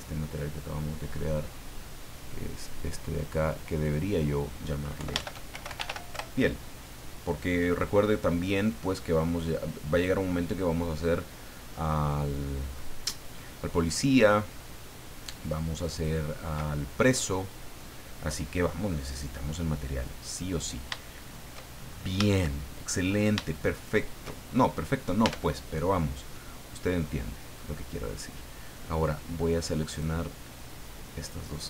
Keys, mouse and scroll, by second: 1.4-1.7 scroll down 1, 2.6 click, 3.7 click, 5.0 Home, 5.3-6.4 typing, 8.5 right click, 9.9 click, 11.6-12.0 scroll down 2, 12.3 scroll down 2, 12.7-13.4 scroll up 4, 13.6-13.9 scroll up 2, 13.9-14.8 scroll down 4, 14.9-15.4 scroll down 2, 15.9 click, 16.9-17.2 scroll down 2, 17.2-18.4 middle drag, 18.5 scroll up 2, 19.4 scroll up 2, 19.7 middle click, 20.8 scroll down 2, 21.0 shift+middle click, 22.3 shift+middle click, 23.0-23.3 shift+scroll up 1, 23.5 shift+middle click, 24.2 shift+scroll up 1, 24.7 right click, 25.2 Tab, 26.2-27.7 middle drag, 29.9 click, 31.1 right click.